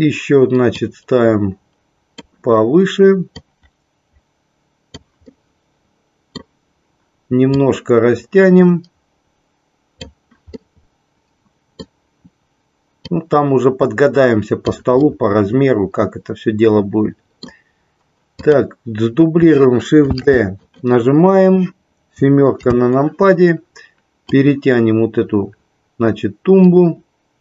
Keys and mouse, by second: 1.0-2.5 drag, 3.6-5.1 drag, 5.3-6.5 middle drag, 7.6-10.2 drag, 10.7-12.1 middle drag, 13.1-14.8 drag, 15.1-17.7 middle drag, 18.6 click, 20.7 click, 22.7 KP_7, 24.6-27.4 drag.